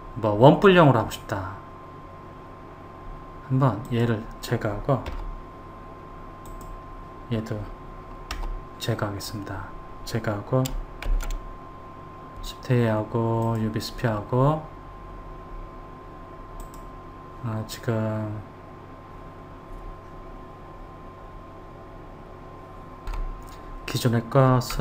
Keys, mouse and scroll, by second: 4.1 click, 5.3 Delete, 6.7 click, 8.5 Delete, 11.3 shift+a, 16.8 click.